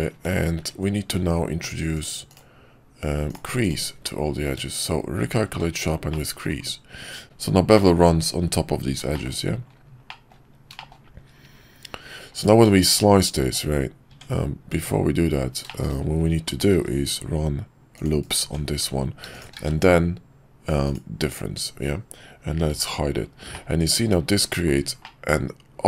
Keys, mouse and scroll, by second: 0.5 ctrl+`, 3.9 q, 6.1-6.5 middle drag, 7.8 middle click, 9.2 shift+middle click, 10.2 middle click, 12.3 click, 14.1 Tab, 15.6 shift+middle click, 16.7 ctrl+r, 18.4 Tab, 19.5 q, 23.5-24.1 middle drag, 24.5 shift+middle click, 25.0-25.8 middle drag.